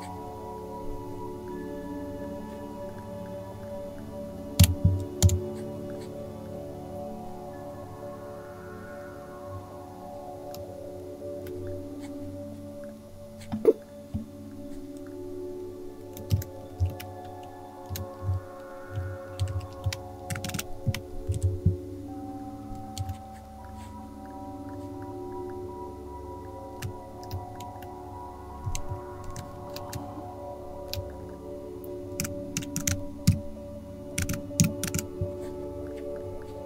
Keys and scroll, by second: 4.5 BackSpace, 5.2 BackSpace, 5.2 \, 16.0-21.7 typing, 23.0 shift+g, 28.6 Down, 28.9 Up, 31.9-35.4 typing.